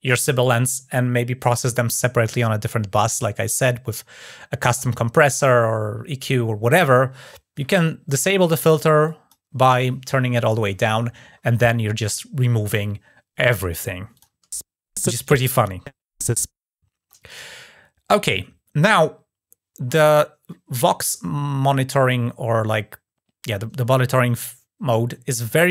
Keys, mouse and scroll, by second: 8.8 click, 11.3 click, 13.9 click.